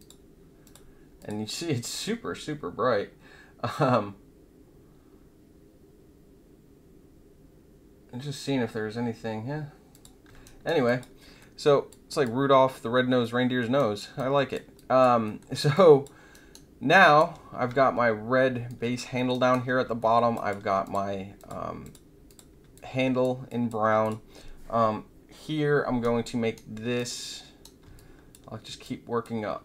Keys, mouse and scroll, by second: 0.6 click, 1.1 click, 9.9 click, 10.4 alt+right click, 10.8 alt+click, 11.3 alt+middle click, 11.8 alt+click, 13.2 alt+middle click, 14.1 alt+click, 14.7 alt+drag, 15.2 alt+middle click, 15.7 alt+click, 16.3 alt+right click, 16.9 alt+click, 18.6 alt+drag, 19.1 alt+middle click, 19.3 alt+right click, 20.0 alt+middle click, 20.3 alt+click, 20.8 click, 21.3 alt+click, 21.8 click, 22.2 click, 22.7-23.2 alt+drag, 23.4 alt+click, 24.0 click, 26.1-26.6 right drag, 27.0-27.8 right drag, 27.9-28.3 alt+drag, 28.8 alt+click.